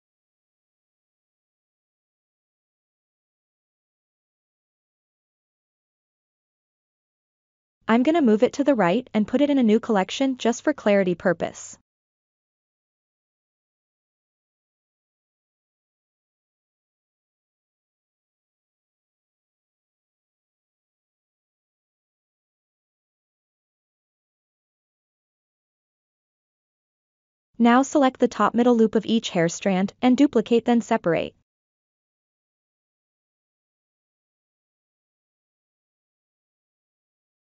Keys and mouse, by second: 0.4-0.8 shift+middle drag, 1.2 g, 2.6-4.0 right drag, 4.9 click, 6.1 shift+middle click, 7.1 click, 8.2-8.7 shift+middle drag, 8.9-10.4 middle drag, 12.5 m, 15.2 BackSpace, 19.0-19.4 ctrl+middle drag, 20.0-21.8 middle drag, 23.4-24.1 drag, 24.3-25.0 ctrl+middle drag, 25.7 Tab, 26.4 middle click, 27.4 1, 29.2 alt+click, 34.7 alt+shift+click, 35.4 alt+shift+click, 36.6 ctrl+z.